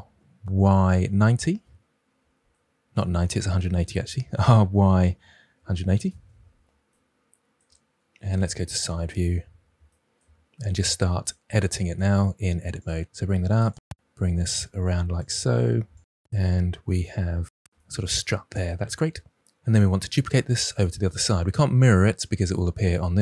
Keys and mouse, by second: 0.5 y, 1.0 9, 1.0 0, 1.4 Return, 3.3 ctrl+z, 4.3-5.6 typing, 5.9 Return, 8.3 KP_3, 11.1 Tab, 12.0 g, 12.7 click, 13.4-16.6 typing, 15.9 click, 16.2 click, 17.0 click, 17.2 Tab.